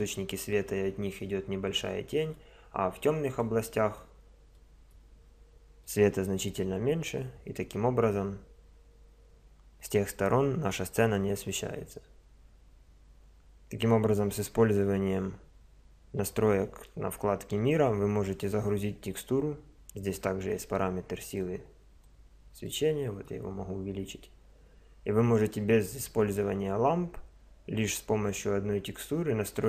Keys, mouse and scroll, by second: 3.8 middle click, 4.0 middle drag, 4.4-4.8 middle drag, 4.8 middle click.